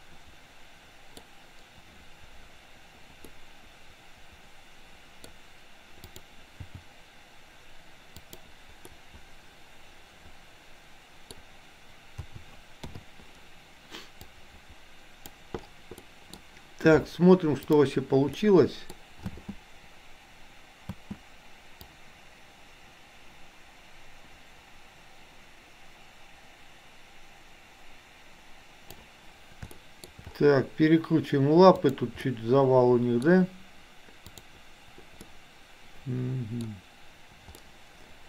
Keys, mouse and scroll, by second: 6.0 click, 6.6 g, 8.9-9.5 scroll up 1, 9.5-11.4 middle drag, 12.3 a, 12.9 i, 14.3-15.4 drag, 16.0-16.4 middle drag, 18.4-18.9 middle drag, 19.1 space, 22.0-29.0 drag, 29.9 shift+middle click, 32.1-33.3 middle drag, 34.3-34.6 drag, 35.4-36.5 middle drag, 37.6-38.2 middle drag.